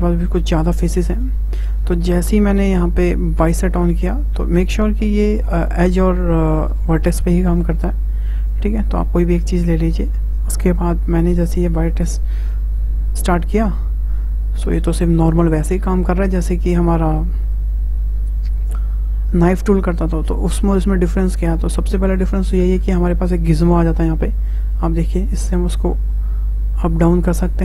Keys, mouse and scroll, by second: 2.6-5.6 drag, 7.5 click, 8.4-11.4 drag, 24.5 click.